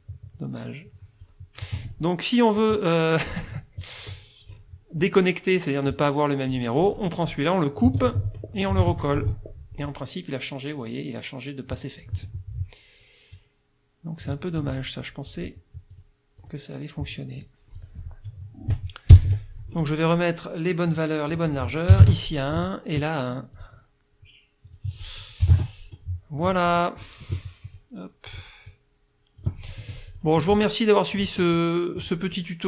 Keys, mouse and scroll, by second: 0.0-1.4 drag, 1.8 F1, 1.8 click, 2.6-4.7 drag, 6.5 click, 6.8 click, 8.0 ctrl+x, 9.2 ctrl+alt+v, 12.2 F2, 13.3-14.4 drag, 14.7 F1, 14.7 click, 15.9 click, 16.4-18.0 drag, 21.3 click, 21.9 KP_1, 22.1 KP_Enter, 23.6 click, 24.8 click, 25.4 KP_1, 25.6 KP_Enter, 26.7 click, 27.0 click, 27.8 click, 28.7-29.9 drag, 29.8 F2, 30.1 click, 30.6 click, 31.2 click.